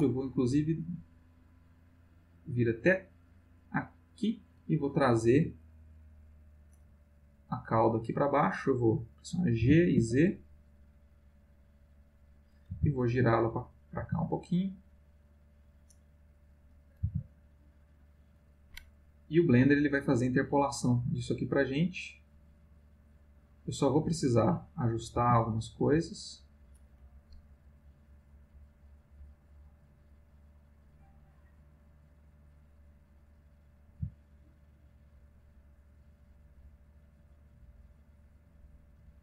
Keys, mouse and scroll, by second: 0.9-4.4 drag, 9.6 g, 9.9 z, 12.2 click, 12.7 r, 13.6 click, 13.9 g, 15.4 click, 17.0 r, 18.0 click, 19.3-24.3 drag, 25.1 g, 26.2 click, 27.8-33.2 drag, 33.9 g, 34.9 click, 35.9-38.9 drag.